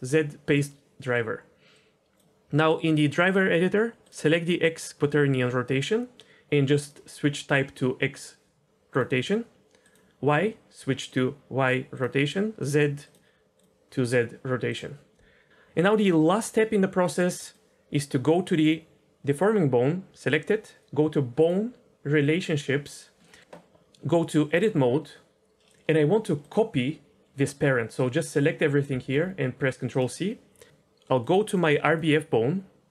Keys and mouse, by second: 0.0 right click, 19.2 click, 22.4 click, 23.2 middle click, 23.9 Tab, 26.5-29.9 drag, 31.8 click.